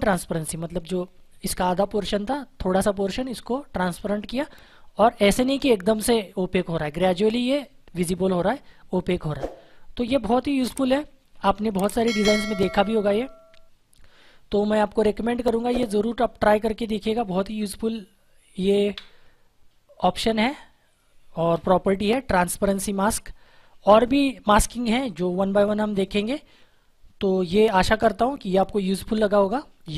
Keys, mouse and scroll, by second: 10.4 ctrl+Num_Lock, 10.8 ctrl+0, 13.1 click, 15.3 click, 20.0 click.